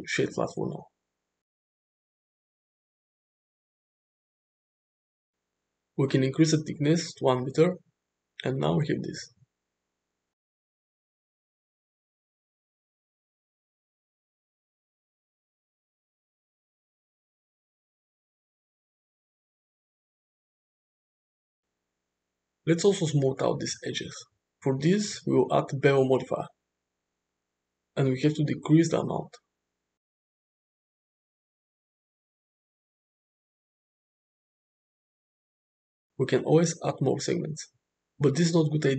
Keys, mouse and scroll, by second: 1.7-2.5 shift+middle drag, 2.7 middle click, 5.1 click, 6.3 click, 6.7 click, 6.7 1, 8.0-8.5 middle drag, 8.5 space, 8.8-9.6 middle drag, 10.2-13.9 middle drag, 14.4 middle drag, 15.0 middle click, 16.2 middle click, 16.7 space, 19.8 click, 22.0-22.6 middle drag, 25.6-27.5 drag, 29.5-33.0 drag, 33.1 space, 36.3 shift+middle click.